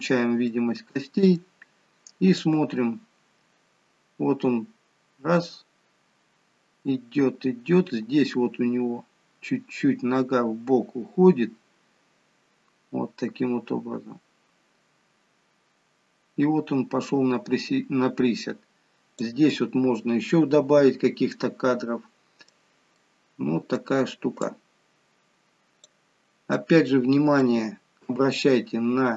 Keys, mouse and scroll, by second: 0.5 middle click, 2.5 click, 20.2-20.9 scroll up 2, 20.9-21.3 scroll down 1, 21.3 middle click, 22.9 middle click, 24.5 click, 26.2 scroll down 1, 26.5 middle click, 28.1 KP_1.